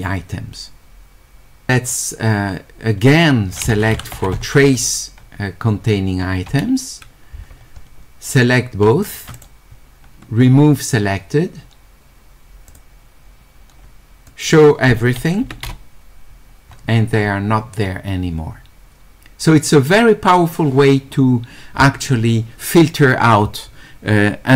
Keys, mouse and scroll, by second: 1.7-2.8 scroll up 2, 2.8-3.9 scroll up 1, 3.7-4.9 typing, 3.9-7.4 scroll up 1, 8.3 click, 9.0 ctrl+click, 12.7 click, 14.3 click.